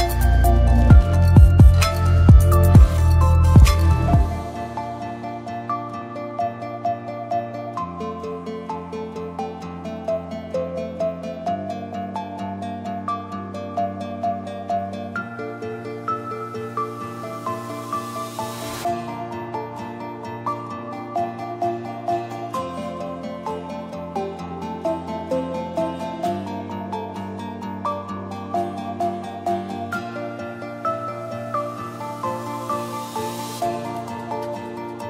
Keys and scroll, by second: 28.4 space, 29.0 d, 29.5 r.